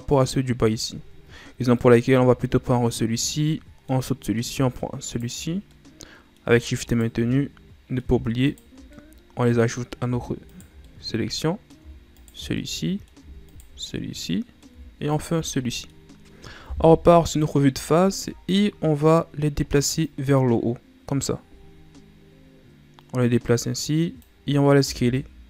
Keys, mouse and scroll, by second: 1.5 scroll down 3, 1.7 middle click, 2.3 scroll up 3, 3.2-3.5 scroll down 1, 3.5-5.0 middle drag, 5.0 shift+right click, 5.6-6.9 middle drag, 6.9 shift+right click, 7.3-8.4 middle drag, 8.4 shift+right click, 8.9-10.4 middle drag, 10.4 shift+right click, 10.8-12.1 middle drag, 12.1 shift+right click, 12.6 middle click, 13.4 shift+right click, 13.8-15.0 middle drag, 15.0 shift+right click, 15.6-16.9 middle drag, 16.9 KP_1, 18.0 shift+scroll up 1, 18.6-20.0 scroll up 1, 20.0 click, 20.1 ctrl+z, 20.3-23.3 drag, 24.8 s.